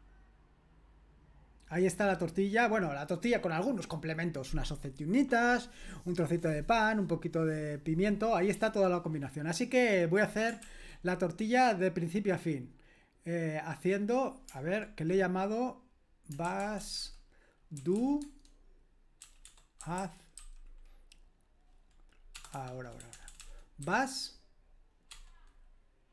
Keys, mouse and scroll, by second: 10.6 ctrl+l, 16.1-20.8 typing, 22.3-23.8 typing, 25.1 BackSpace.